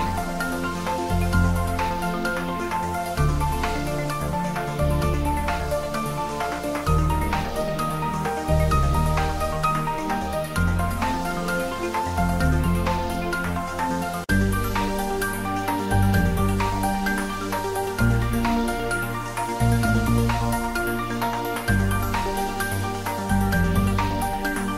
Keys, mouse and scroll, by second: 9.5 scroll down 1, 10.9 click, 13.3 s, 15.6 click, 16.6 g.